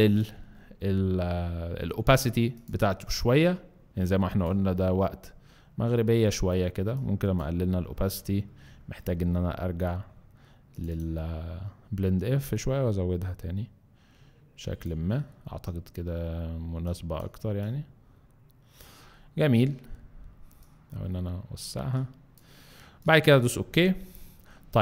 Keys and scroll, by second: 0.4 alt+space.